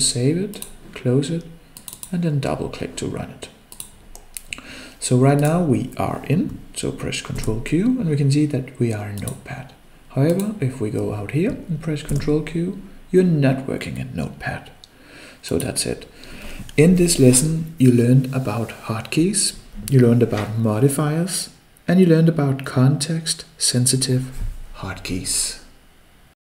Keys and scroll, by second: 7.6 ctrl+q, 12.3 ctrl+q.